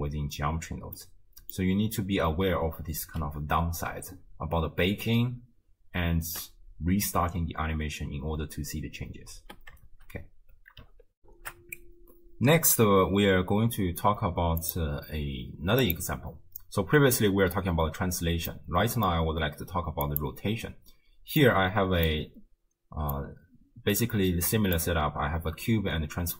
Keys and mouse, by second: 1.0 middle click, 6.2 shift+space, 8.2 space, 9.4 space, 11.2 ctrl+alt+shift+q, 14.7 click, 18.6-19.2 middle drag, 20.2 click, 21.4 middle click, 23.2 click, 23.4-24.9 right drag.